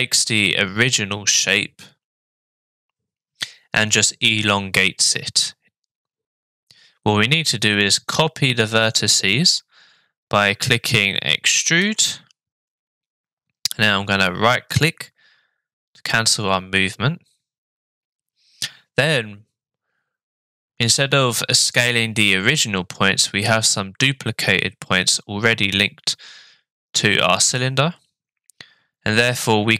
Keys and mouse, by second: 9.0 click, 11.8 e, 29.3 s.